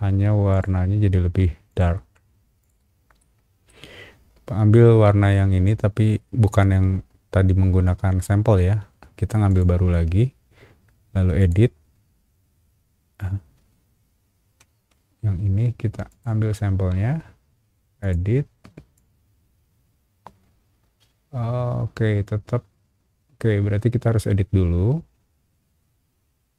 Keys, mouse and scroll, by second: 0.5 click, 1.7 click, 2.6 click, 3.2 middle click, 9.5 click, 11.4 click, 16.1 alt+click, 18.0 alt+click, 18.9-26.5 alt+drag.